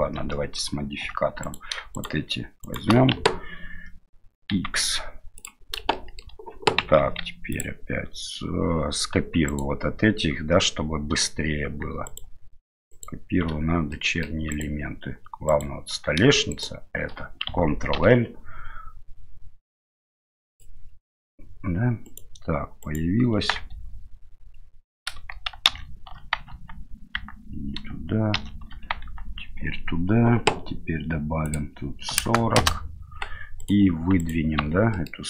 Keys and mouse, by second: 1.0 2, 1.4 right click, 2.6 shift+right click, 4.5 x, 6.0 middle click, 6.8 Tab, 7.5-8.7 drag, 9.5 right click, 12.1 shift+right click, 12.9 shift+right click, 13.9 middle click, 14.5 right click, 15.5 right click, 16.5 shift+right click, 17.9 ctrl+l, 21.1 middle click, 22.0 right click, 22.8 right click, 23.7 Tab, 25.7 ctrl+shift+n, 26.5 Tab, 27.2 Tab, 28.4 shift+n, 29.0 Tab, 31.6-33.1 drag, 33.6 right click, 34.2 right click, 34.6 Tab, 34.9 middle click.